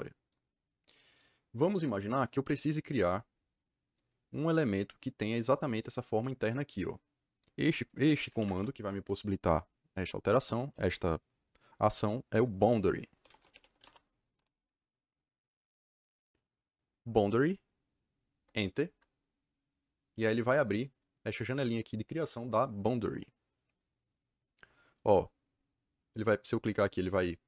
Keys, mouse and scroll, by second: 8.3 Escape, 12.9-14.3 typing, 18.3 KP_Enter, 20.9 click.